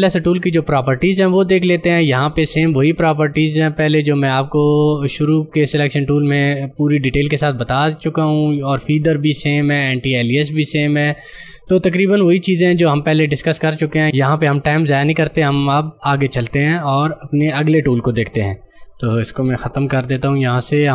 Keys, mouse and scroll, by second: 1.2 ctrl+click, 18.9 ctrl+click, 19.7 ctrl+Delete.